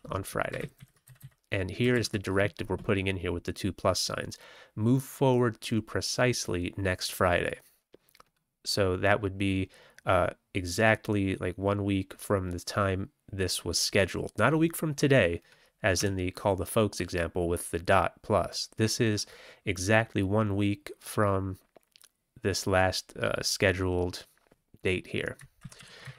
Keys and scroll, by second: 0.0-0.3 typing, 0.5 ctrl+x, 0.7 ctrl+s, 1.0 Down, 1.1 Down, 1.8 ctrl+a, 15.9 Tab, 25.5 ctrl+x, 25.7 ctrl+s, 25.9 Up.